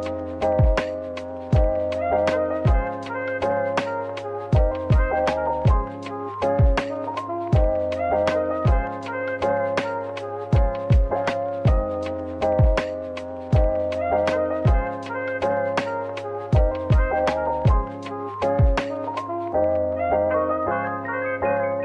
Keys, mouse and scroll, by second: 0.8 a, 4.6 Tab, 5.6 /, 6.1 scroll down 1, 6.7 middle click, 12.9 scroll up 1, 13.4 Tab, 15.5 ctrl+r, 16.5-17.8 scroll up 1, 17.9 double click, 18.5 ctrl+r, 18.8 ctrl+scroll up 1, 19.8 double click, 21.0 /, 21.5 middle click.